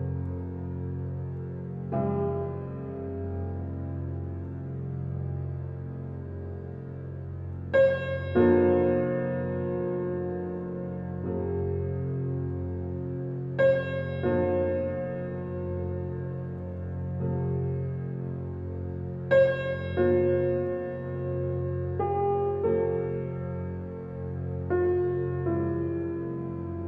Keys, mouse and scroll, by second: 2.8 ctrl+alt+z, 4.7 alt+click, 7.4-12.5 drag, 14.4 click, 16.7 click, 17.6 ctrl+alt+z, 18.3 click, 19.9 alt+click, 20.3 click, 24.5 ctrl+alt+scroll down 1, 26.5 ctrl+alt+scroll up 1.